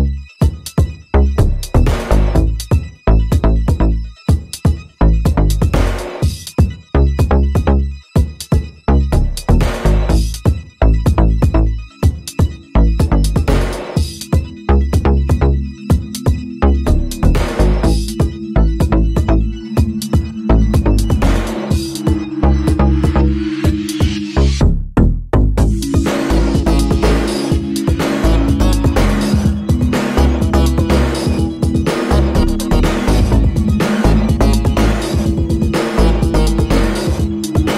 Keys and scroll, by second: 6.4 5, 6.4 Return, 10.8 5, 12.4 Return, 18.1 super+c, 18.2 super+v, 25.2 4, 25.3 Return, 27.9 super+c, 28.0 super+v, 37.5-37.7 typing.